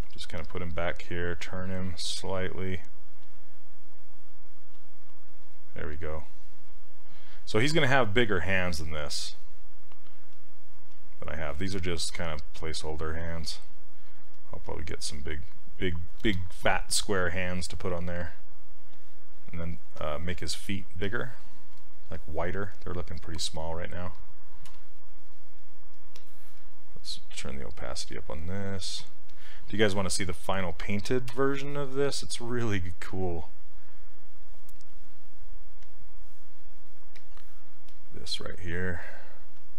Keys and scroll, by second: 23.5 s, 24.7 z, 31.3 z.